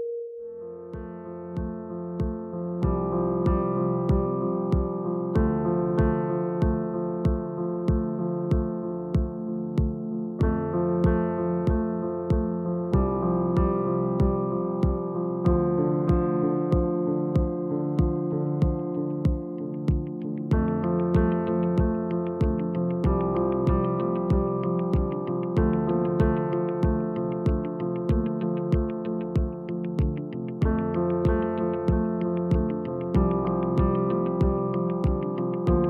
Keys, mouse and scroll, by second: 0.3 click, 0.5 g, 1.6 click, 2.2 click, 2.3 g, 4.5 click, 5.3 click, 6.4 click, 6.5 g, 7.7 click, 8.7 click, 8.9 g, 9.7 click, 9.9 g, 10.8 click, 11.7 click, 11.9 g, 12.8 click, 13.7 click, 13.7 g, 14.9 click, 15.1-16.8 scroll down 1, 16.8-18.1 scroll down 1, 18.3 click, 18.9 Tab, 20.3 g, 24.4-25.0 scroll up 1, 25.0 s, 26.1 Tab, 26.3 click, 28.3-31.0 scroll down 1, 32.9 click, 35.7 shift+d.